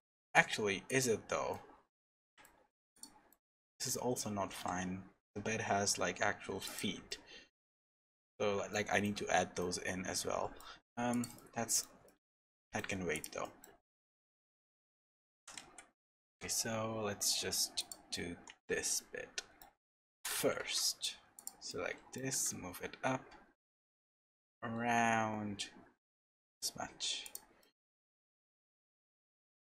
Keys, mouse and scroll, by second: 0.9 click, 1.5 middle click, 2.2 Tab, 2.4 middle click, 2.9 click, 3.3 middle click, 4.5 g, 7.1 middle click, 8.0 Tab, 8.7 shift+middle click, 9.2-9.6 scroll up 1, 9.6 middle click, 10.9-11.2 scroll down 2, 11.1 click, 11.3 middle click, 12.6 middle click, 13.1 click, 13.4 middle click, 13.9 shift+middle click, 14.5-15.0 scroll up 2, 15.3 g, 18.1 middle click, 19.8 shift+middle click, 20.3 Tab, 20.6 3, 20.8 middle click, 21.3 click, 21.7 middle click, 22.3 g, 27.6 middle click, 28.0 middle click, 28.9-29.4 scroll up 2, 29.3 Tab.